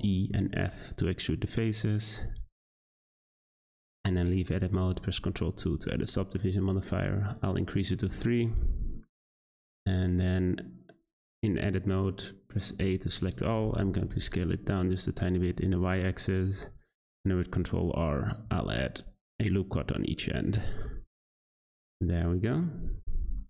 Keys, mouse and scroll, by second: 3.5 Tab, 4.9 ctrl+2, 6.8-7.7 drag, 7.7-8.0 scroll up 1, 8.0-9.5 middle drag, 9.5 Tab, 9.7-12.8 scroll down 2, 12.8 a, 13.9 s, 15.7 middle click, 16.7 r, 18.5 r, 20.1 Tab, 20.4 click, 20.7 scroll down 1, 20.8-22.8 middle drag, 22.8-23.2 scroll down 1, 23.2 `.